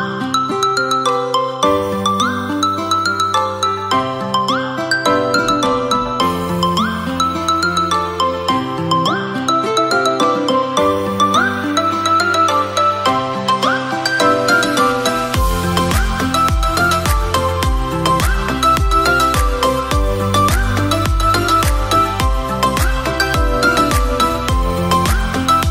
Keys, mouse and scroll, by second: 3.9-5.6 drag, 10.4-11.2 scroll down 4, 11.2-13.6 drag, 14.6-16.0 drag, 23.9 click, 24.8-25.7 drag.